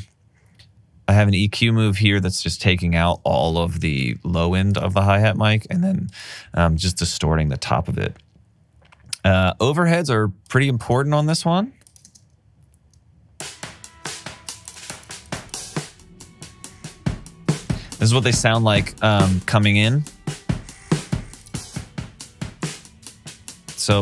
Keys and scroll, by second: 3.8 alt+super+w, 5.5 alt+super+w, 7.4 alt+super+w, 9.5 alt+super+w, 12.2 space, 14.5 space.